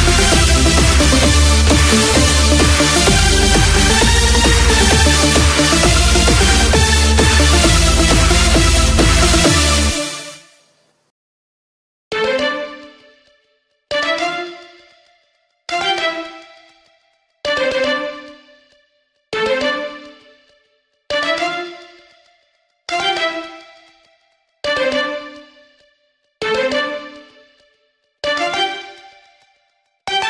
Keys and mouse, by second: 5.5 KP_6, 6.1 KP_6, 6.8 KP_6, 7.5 KP_6, 10.1-16.8 KP_2, 18.1 KP_4, 22.1 KP_Add, 26.1 shift+a.